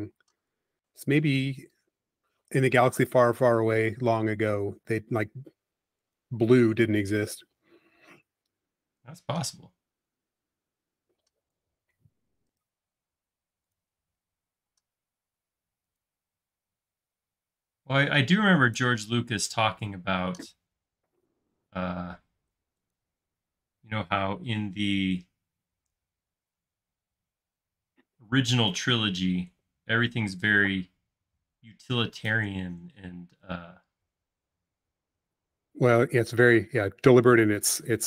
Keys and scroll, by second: 0.2 p, 3.4 f, 5.2-5.9 typing, 6.5 Up, 7.9 space, 11.2 space, 14.7 m.